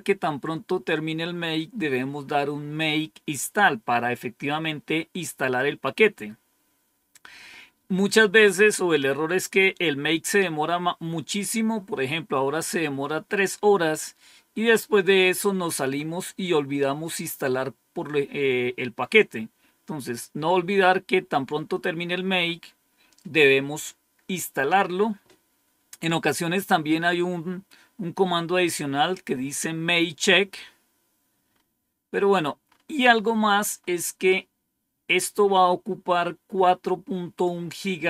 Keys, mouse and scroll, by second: 31.4-34.4 scroll up 4.